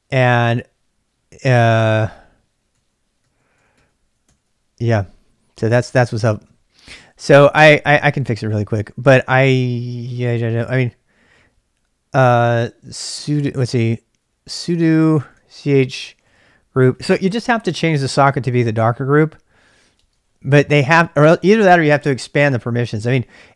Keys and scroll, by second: 2.0 ctrl+[, 2.1-3.8 typing, 4.2 ctrl+c, 6.1-8.6 typing, 13.6-23.5 typing.